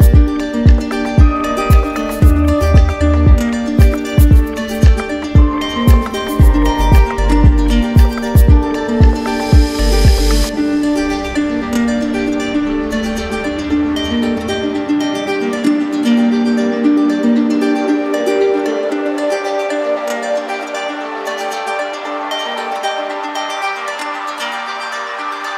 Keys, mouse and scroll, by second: 1.5 click, 2.0 click, 2.7 alt+click, 3.5 click, 4.5 click, 5.0 alt+click, 7.1 click, 8.2 alt+click, 8.8 click, 10.0 click, 10.9 alt+click, 11.6 click, 13.5 click, 14.4 alt+right click, 15.8 alt+right click, 16.8 alt+click, 19.7 alt+click, 20.9 alt+click, 21.8 alt+click, 23.5 click, 25.1 click.